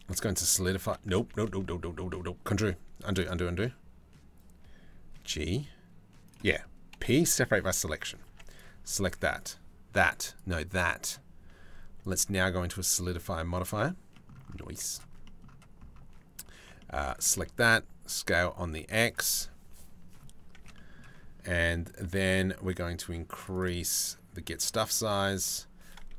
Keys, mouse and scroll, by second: 0.9 ctrl+z, 2.7 click, 4.8 g, 6.5 p, 7.9 Tab, 9.0 click, 9.9 click, 11.7-13.3 drag, 13.7 middle click, 14.2 z, 14.8 middle click, 16.2 Tab, 16.4 click, 16.7 a, 16.9 s, 20.2 Tab, 20.3 middle click, 23.1 middle click, 23.6 middle click, 25.0 middle click.